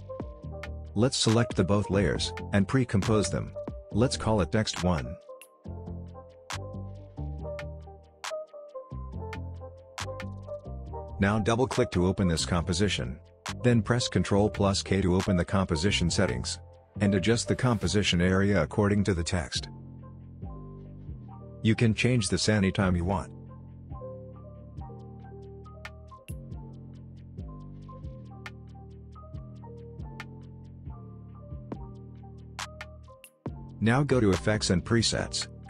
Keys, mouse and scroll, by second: 0.9-1.9 click, 2.1 right click, 3.0 click, 4.1-5.6 typing, 6.8 Return, 9.6 click, 14.0 ctrl+k, 15.7-16.3 drag, 19.3-19.9 click, 23.3 drag, 23.8 typing, 32.5-33.4 scroll down 1, 33.4 scroll up 1, 34.7 click.